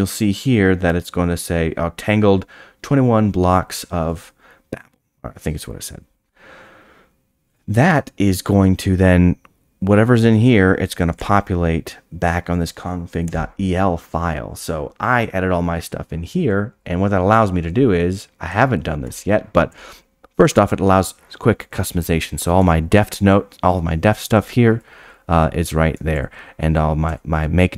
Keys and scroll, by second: 15.3-15.8 scroll down 8, 19.0 Tab, 22.7 Tab, 26.1 Tab.